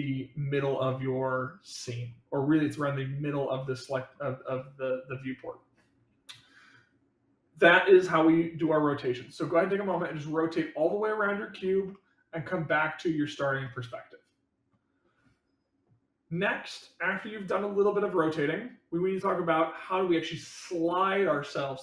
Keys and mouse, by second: 3.6-4.1 middle drag, 9.9-10.5 middle drag, 10.9-11.6 middle drag, 11.9-12.4 middle drag, 12.8-13.3 middle drag, 13.6-14.7 middle drag.